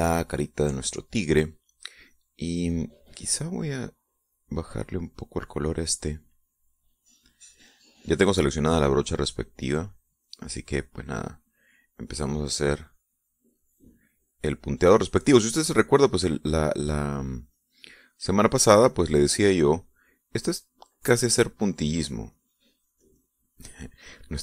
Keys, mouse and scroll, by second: 3.5 click, 5.2-6.6 drag, 9.8 click, 10.6 click, 11.0-16.1 drag, 16.2-24.4 drag.